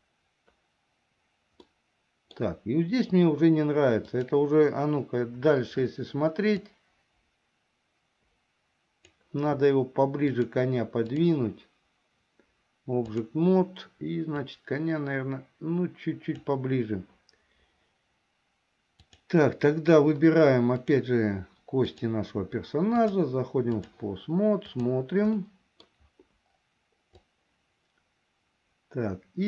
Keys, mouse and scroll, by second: 1.7 middle click, 4.1 click, 6.8-9.3 drag, 10.3-11.4 drag, 13.1 click, 14.6-16.7 drag, 19.0 click, 21.0 click, 22.0 click, 23.0-24.1 drag, 24.9 click, 25.5 middle click, 27.5-29.4 drag.